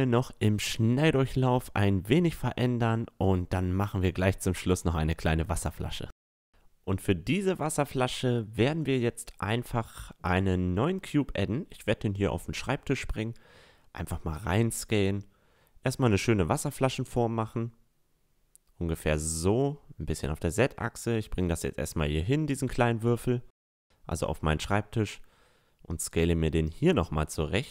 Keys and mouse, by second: 1.0 Tab, 1.2 Tab, 1.6 right click, 1.7 click, 2.2 a, 2.2-2.5 middle drag, 2.7-4.3 middle drag, 4.4 middle click, 4.6 Tab, 4.7 Tab, 4.9 click, 4.9 right click, 6.0 Tab, 6.1 Tab, 6.1 a, 6.4 middle click, 7.6 middle click, 8.9-11.1 middle drag, 12.3-14.2 drag, 13.3 s, 14.8-16.5 drag, 15.5 s, 18.4 s, 20.4-22.4 drag, 22.4-23.4 middle drag, 23.0-25.7 drag, 23.0-23.4 right drag, 24.5 s, 26.1 s.